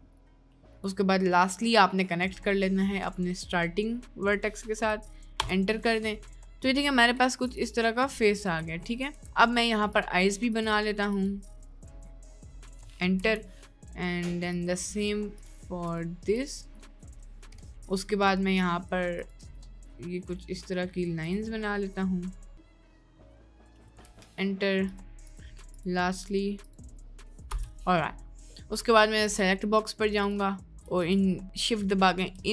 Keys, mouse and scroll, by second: 7.0 3, 7.4-9.2 drag, 10.2-13.4 drag, 14.5-17.4 drag, 19.3-24.1 drag, 24.8-27.6 drag, 29.2 click.